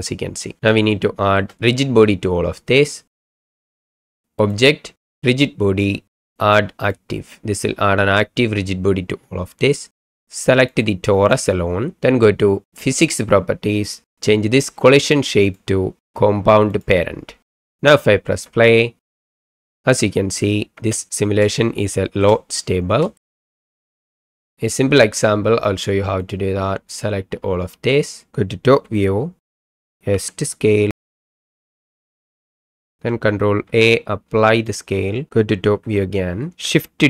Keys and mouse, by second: 1.1 shift+click, 3.2 click, 4.4-6.9 drag, 10.7 click, 15.5-16.8 drag, 18.4 space, 20.7 space, 21.6-22.2 shift+middle drag, 23.2 shift+middle click, 23.3 middle drag, 23.6 shift+middle click, 24.5 Delete, 24.5 middle click, 27.0-28.0 drag, 28.7 KP_7, 30.1 s, 32.7 middle drag, 33.6 ctrl+a, 35.7 KP_7.